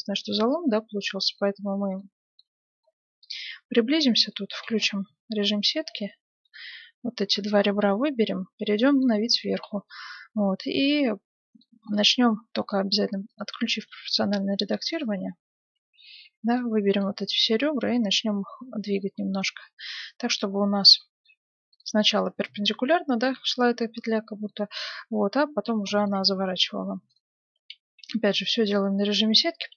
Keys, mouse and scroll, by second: 2.1-4.8 middle drag, 3.2 y, 5.1 z, 7.3-8.3 ctrl+shift+right drag, 7.3 KP_7, 7.6 ctrl+shift+middle click, 8.0-10.4 middle drag, 10.7 g, 12.8-14.8 drag, 13.9 g, 15.2 z, 16.2 b, 17.4 z, 18.1 g, 23.3 g, 24.4-27.2 middle drag, 25.5 a, 25.6 b, 26.1 g, 27.3 z, 27.8 a, 28.2 b, 28.6 g.